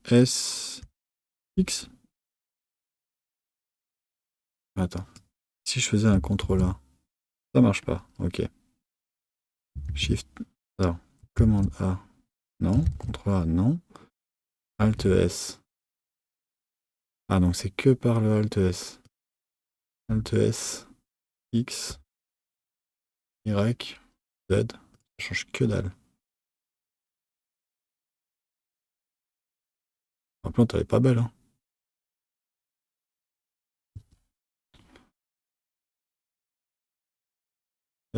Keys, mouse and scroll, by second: 4.5 z, 5.0 click, 6.4 ctrl+a, 9.8 shift+a, 11.3 a, 12.8 ctrl+a, 14.7 alt+s, 19.1 Left, 19.9 alt+s, 26.5 middle click, 28.1 Tab, 30.3 Tab, 33.9 KP_3, 35.9 click, 37.9 s.